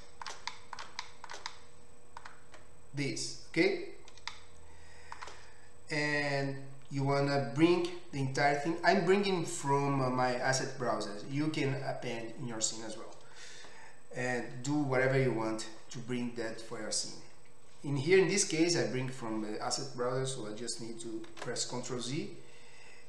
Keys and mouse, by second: 22.7 ctrl+z.